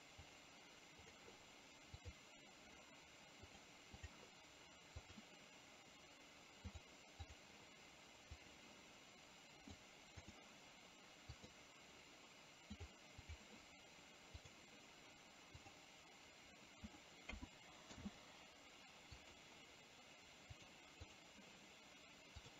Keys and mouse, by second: 0.3 click, 1.2 click, 2.0 click, 3.5 click, 5.2 click, 9.8 click, 11.4 click, 13.3 click, 14.5 click, 15.7-18.0 drag, 20.7 click, 21.0 click, 22.4 click.